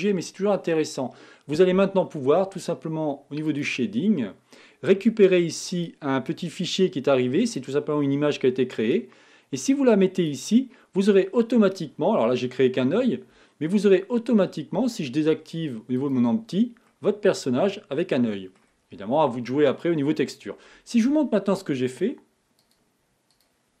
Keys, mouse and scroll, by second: 4.4 click, 6.6-12.9 drag, 14.2 scroll down 2, 16.6 click, 17.1-23.8 middle drag.